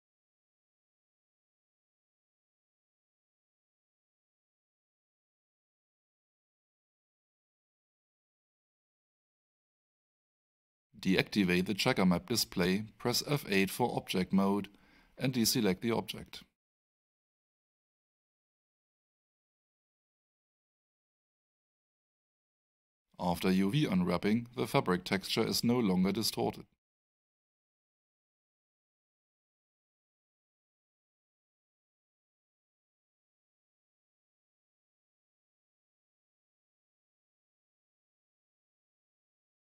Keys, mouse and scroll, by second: 1.0 click, 7.3 alt+click, 10.8 click, 11.7 click, 15.4 alt+middle click, 21.2 F8, 22.8 click, 26.6 alt+right click, 27.8 alt+middle click, 28.9 alt+right click, 32.0 alt+click, 36.5 alt+click, 38.0 alt+middle click.